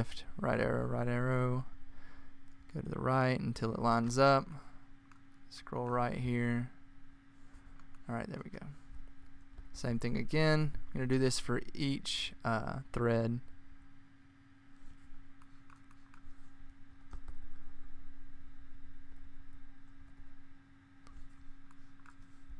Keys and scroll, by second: 0.1 Right, 0.8 Right, 3.8 Right, 4.3 Right, 4.3 Right, 4.6 Right, 4.8 Right, 5.0 Right, 5.2 Left, 9.6 Right, 10.3 Right, 10.5 Right, 10.6 Right, 13.6 Left, 14.8 Left, 15.3 Left, 15.4 Left, 15.8 Left, 16.0 Left, 17.7 alt+Right, 21.5 Right, 21.8 Right.